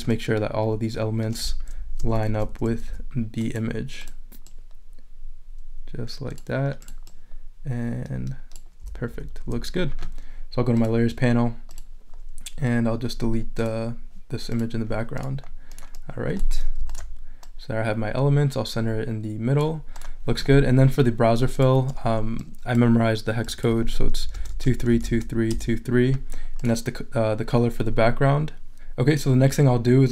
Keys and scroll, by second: 2.2 Up, 2.5 Right, 2.7 Up, 2.9 Left, 8.8 Left, 24.0-25.5 typing.